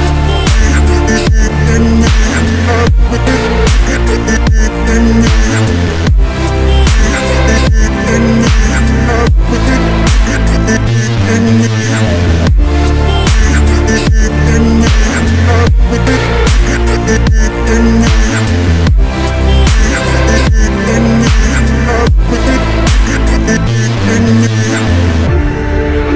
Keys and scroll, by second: 1.2 Delete, 4.7 Delete, 17.7 shift+Page_Down, 19.8 Delete, 23.8 Delete, 25.1 Delete.